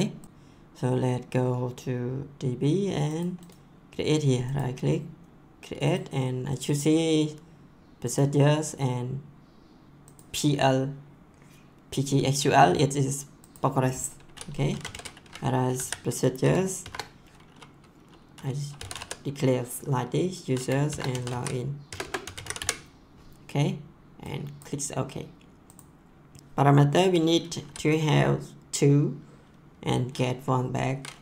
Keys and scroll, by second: 14.5-16.7 typing, 18.5-19.4 typing, 20.6-23.0 typing, 26.4 BackSpace.